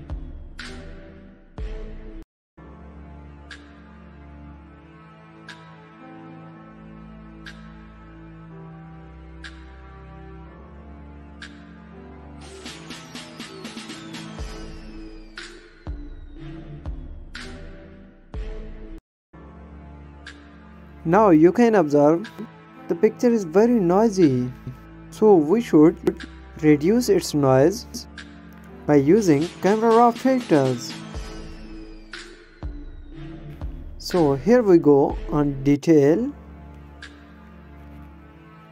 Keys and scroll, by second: 0.1 space, 1.5 ctrl+z, 3.5 space, 5.3 space, 7.1 space, 10.6 ctrl+z, 10.9 shift+F12, 11.5 ctrl+-, 11.8 ctrl+=, 12.6 space, 13.2 space, 13.7 space, 13.8 space, 15.1 space, 17.4 space, 18.0 space, 20.1 ctrl+-, 24.4 space.